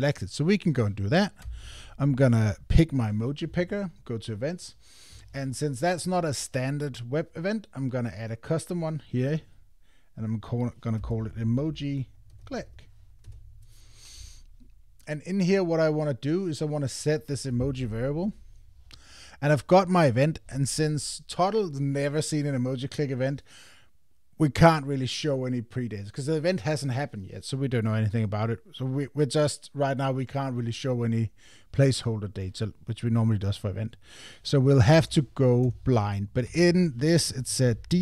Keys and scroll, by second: 13.2 Return, 35.6 Return, 36.5 Tab.